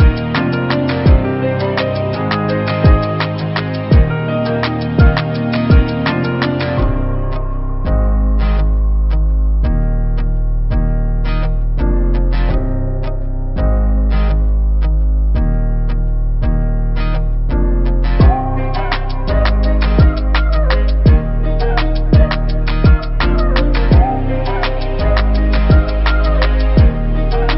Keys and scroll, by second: 3.8 ctrl+t, 6.8 Return, 11.8 Up, 14.1 ctrl+t, 16.9 Return, 19.0 Up, 19.5 Up, 24.4 Delete, 25.7 ctrl+d, 26.2 v.